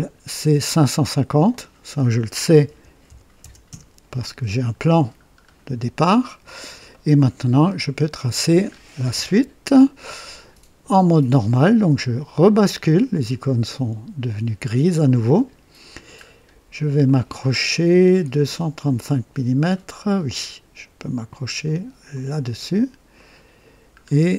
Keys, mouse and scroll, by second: 1.4 click, 2.6 KP_5, 3.0 KP_5, 3.3 KP_0, 3.6 KP_Enter, 5.4 scroll up 1, 6.1 right click, 6.1 typing, 6.9-7.4 right drag, 7.4 typing, 7.5-7.9 scroll down 1, 8.0-8.6 right drag, 8.7 scroll up 1, 9.2-10.0 right drag, 12.4 click, 15.3 click, 16.2 scroll up 1, 17.0-17.8 right drag, 22.0 click, 23.1 middle click, 23.9-24.3 scroll down 2.